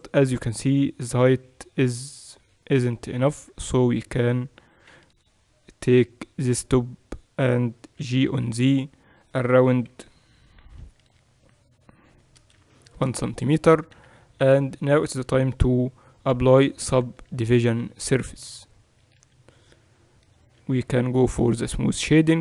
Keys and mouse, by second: 2.1-4.9 drag, 3.3 z, 3.9 a, 4.9 b, 8.0 g, 14.0 z, 14.5 Tab, 17.3 ctrl+2, 19.3 KP_8, 19.5 KP_6, 20.6 t, 22.2-22.4 drag.